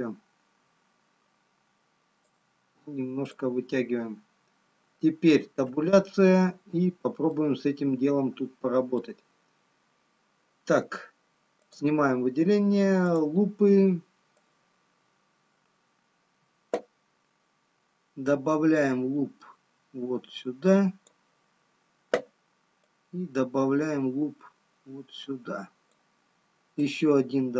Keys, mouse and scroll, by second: 2.2 click, 5.4 Tab, 6.4 scroll up 2, 7.9 middle click, 7.9 scroll up 1, 14.1 click, 23.3 click.